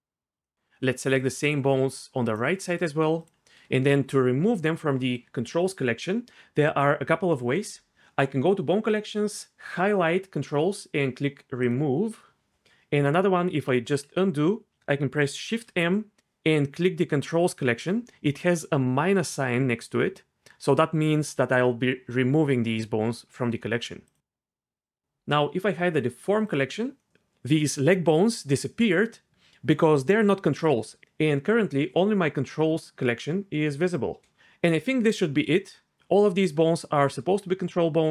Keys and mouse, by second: 2.3 shift+click, 2.8 shift+click, 11.6 click, 13.8 ctrl+z, 15.4 shift+m, 26.4 click.